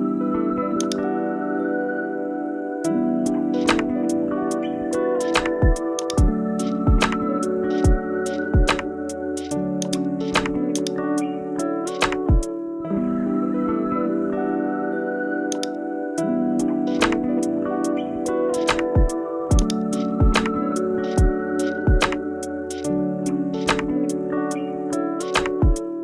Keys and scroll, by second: 2.6-4.0 typing, 4.1 super+a.